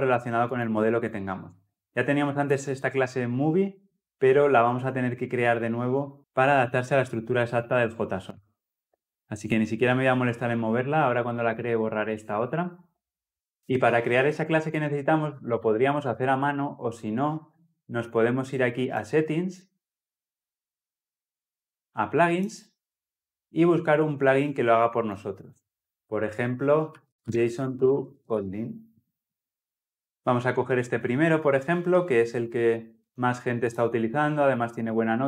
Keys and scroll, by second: 19.8 ctrl+alt+s.